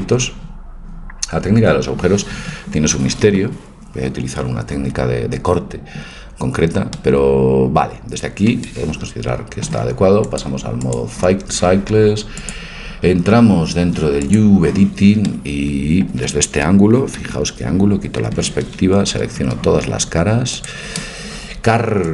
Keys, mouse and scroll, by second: 10.3-12.2 drag, 12.4-14.3 drag, 15.2-17.2 middle drag, 17.2 KP_5, 19.1 a, 19.4 a, 20.6-22.1 drag.